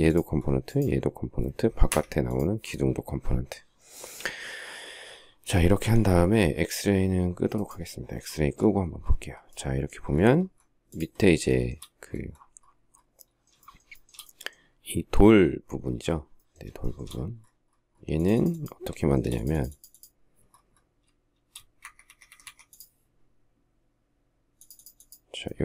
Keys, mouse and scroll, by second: 1.7 Escape, 11.3 shift+middle click, 13.4 shift+middle click, 13.8 shift+double middle click, 16.6 shift+middle click, 16.8 shift+scroll, 18.8 shift+middle click, 19.0 shift+double middle click, 21.6 shift+Escape, 22.1 Escape.